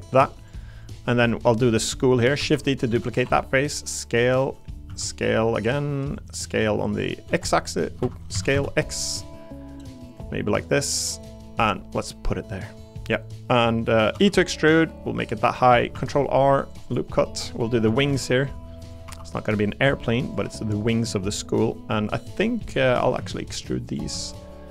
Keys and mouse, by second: 0.0 click, 0.4 click, 0.8 click, 1.2 click, 2.4 shift+d, 2.9 s, 3.2 y, 4.4 click, 4.9 s, 6.1 click, 7.3 x, 8.0 Escape, 8.3 s, 8.5 x, 11.1 click, 14.1 e, 15.4 click, 15.9 ctrl+r, 17.1 click, 17.8 s, 18.1 x, 18.8 click, 19.0 3, 19.3 click, 19.5 middle click, 20.2 ctrl+click, 20.5 click, 21.7 click, 22.0 middle click, 22.6 click, 22.9 middle click, 23.8 shift+click, 24.2 middle click.